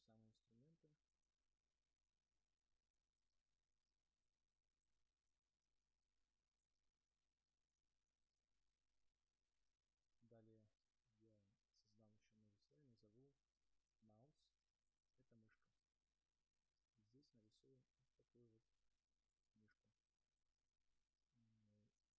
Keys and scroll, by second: 14.9 Return, 17.0 space.